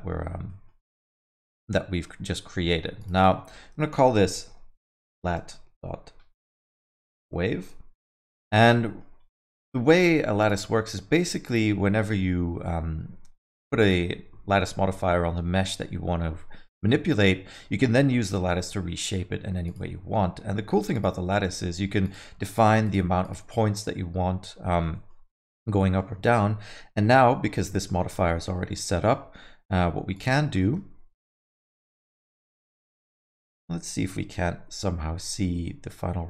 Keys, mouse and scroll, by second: 0.5 alt+middle click, 1.9 middle click, 3.0 click, 3.1 click, 8.5 alt+middle click, 9.2 scroll up 1, 9.4 alt+middle click, 10.4 click, 10.7 alt+middle click, 11.4 click, 13.3 scroll up 1, 13.3 middle click, 13.8 click, 19.6 click, 20.9 click, 22.0 click, 22.5 click, 22.8 click, 23.2 click, 24.6 alt+middle click, 24.9 middle click, 25.8 middle click, 26.7 KP_1, 28.5 alt+middle click, 28.9 middle click, 30.1 click, 30.6 middle click, 31.2 middle click, 31.4 scroll down 1, 32.4 KP_0, 34.0 KP_1, 35.1 middle click.